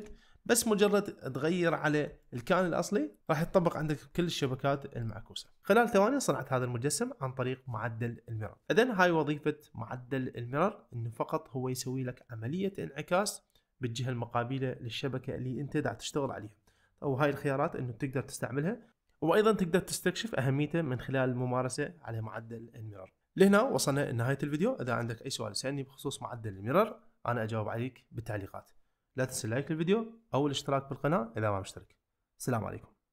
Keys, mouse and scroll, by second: 2.3 shift+middle click, 2.7 middle click, 4.2 ctrl+middle click, 5.5 middle click.